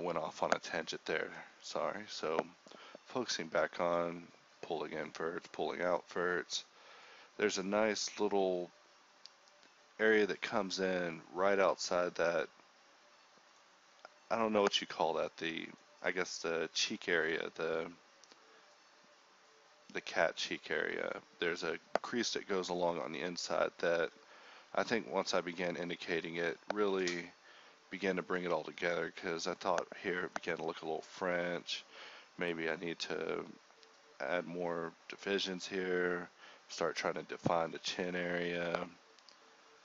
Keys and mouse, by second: 0.7 ctrl+b, 2.9 middle click, 3.9 g, 4.5 Tab, 5.1-11.7 typing, 5.4 Tab, 6.5 click, 7.4 click, 8.3 click, 9.4 click, 12.4 ctrl+r, 13.2 k, 15.0-18.2 typing, 17.6 ctrl+r, 19.7 g, 20.7 g, 21.5 alt+s, 22.0 g, 22.3 g, 23.4 g, 23.7 KP_1, 23.9 Tab, 24.5 Tab, 25.7 KP_1, 26.5 ctrl+Tab, 28.9 z, 29.2 z, 30.3 e, 30.5 alt+s, 31.9 ctrl+Tab, 32.4 right click, 32.5 g, 32.8 right click, 33.0 g, 33.5 click, 33.6 Tab, 35.5 Tab, 36.1 KP_1, 36.2 Tab, 36.5 Tab, 37.8-39.8 typing, 39.7 ctrl+Tab.